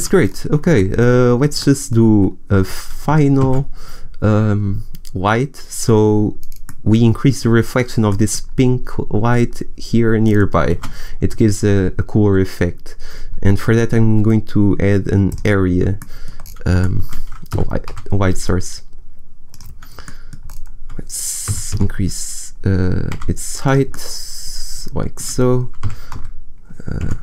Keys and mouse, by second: 3.3 shift+a, 10.6 shift+a, 17.4 g, 21.4 g, 23.7 click, 24.0-25.5 middle drag, 25.7 g.